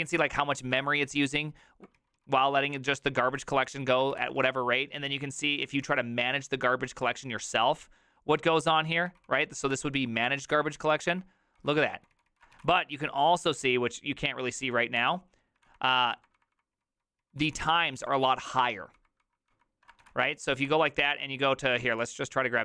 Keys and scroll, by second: 0.0-0.7 typing, 0.8 ctrl+d, 1.5-1.8 ctrl+d, 2.0 ctrl+u, 2.2 ctrl+u, 2.4 ctrl+u, 2.8 ctrl+d, 3.1 ctrl+d, 4.0-9.5 typing, 9.7 Return, 10.8 ctrl+d, 11.1 ctrl+d, 11.6 ctrl+d, 12.0 ctrl+u, 12.5-13.8 typing, 15.0 Return, 15.0-15.9 typing, 15.7 ctrl+d, 15.9 ctrl+d, 16.2 ctrl+d, 16.4 ctrl+d, 16.8 ctrl+u, 17.0 ctrl+u, 17.2 ctrl+u, 17.5 ctrl+u, 18.0 ctrl+d, 18.2 ctrl+d, 18.4 ctrl+d, 18.5 ctrl+d, 19.8-21.9 typing, 20.7 ctrl+d.